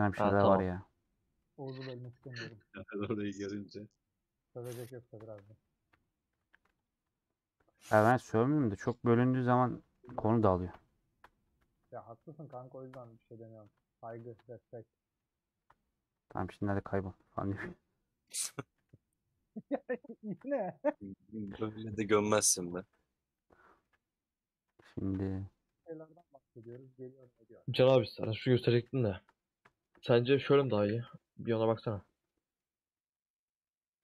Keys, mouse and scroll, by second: 2.1 alt+z, 2.3 middle click, 2.7 scroll down 2, 2.9-3.9 middle drag, 3.9 click, 4.8 3, 4.8-6.0 alt+drag, 6.0 ;, 6.4 a, 7.6-9.2 middle drag, 9.2 scroll down 1, 9.4-10.7 middle drag, 10.7 /, 11.3 Tab, 11.8 middle click, 12.1-12.9 scroll up 1, 13.1 click, 14.0 /, 14.4 Tab, 14.6-15.7 middle drag, 15.7 3, 16.4-17.5 middle drag, 17.5 alt+click, 17.8 middle click, 20.3 ctrl+z, 20.8 ;, 20.9 middle click, 21.4 2, 22.4 a, 23.1 middle click, 24.0 Tab, 24.0-25.2 middle drag, 25.2 Tab, 25.2 middle click, 25.7 2, 26.7 a, 28.7 Tab, 29.6 shift+middle click, 30.3 click, 31.0 /, 31.3 middle click, 31.8 Tab, 31.9-32.9 middle drag, 32.9 3, 33.1 click, 33.4 middle click.